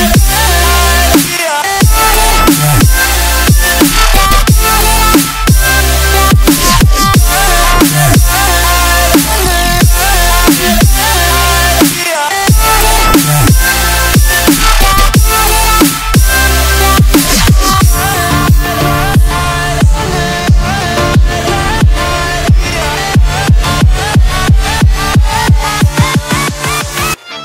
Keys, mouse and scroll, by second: 0.0 r, 1.2-2.6 shift+middle drag, 1.7 e, 2.6 r, 3.7 e, 4.3 r, 5.2 click, 5.3 e, 6.2 click, 6.3 e, 7.2 shift+middle click, 7.9 e, 8.6 r, 9.6 click, 10.7 e, 11.4 r, 12.7 scroll down 2, 12.9-13.9 shift+middle drag, 13.3 e, 13.9 r, 15.0 shift+middle click, 15.4 e, 16.5 r, 17.1 click, 18.6 click, 18.7 e, 19.4 r, 20.3 click, 20.5 s, 21.4 click, 21.7 s, 22.7 shift+middle click, 23.0 click, 23.3-24.3 drag, 24.4 e, 25.3 r, 26.7 click, 27.3 s.